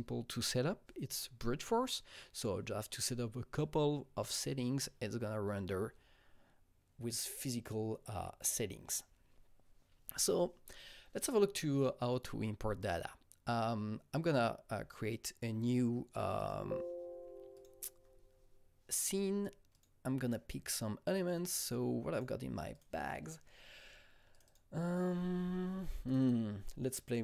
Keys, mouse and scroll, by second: 12.8 click, 16.4 click, 17.5 click, 19.7 click, 22.3 click, 22.7 click, 24.3 click, 24.4 double click.